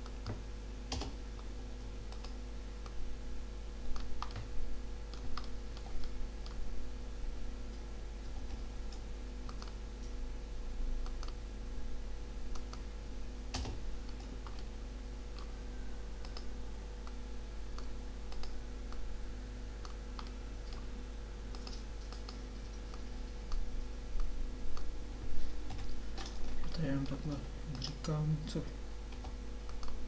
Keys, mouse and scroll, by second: 2.2 scroll down 1, 2.8-3.8 middle drag, 4.3 middle click, 5.4 middle click, 5.9 middle click, 8.4 k, 14.6-16.3 middle drag, 20.3 middle click, 24.2 click, 25.7 KP_7, 29.2 g.